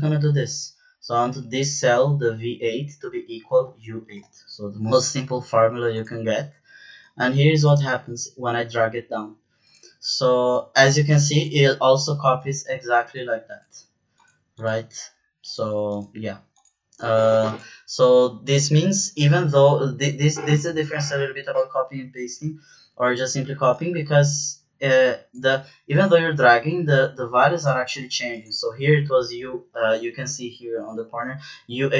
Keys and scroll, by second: 4.1 Return, 31.7 Down.